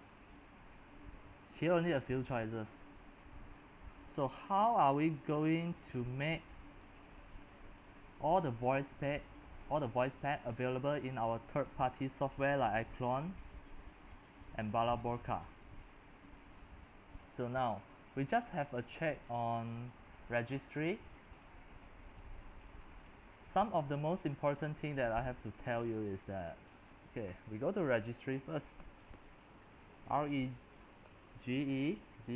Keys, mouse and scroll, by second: 7.9 middle click, 7.9-8.2 scroll, 8.2-9.7 scroll down 16, 9.7-10.9 scroll up 12, 10.9-12.0 scroll down 15, 12.0-13.0 middle drag, 12.0 scroll, 13.0-26.1 drag, 26.1-27.7 middle drag, 26.1 scroll down 1, 26.2-26.5 scroll down 1, 26.3 scroll, 26.5-26.9 scroll down 1, 26.7 scroll, 26.9-27.7 scroll down 1, 27.7 click, 28.4-29.6 typing, 32.1-32.3 typing.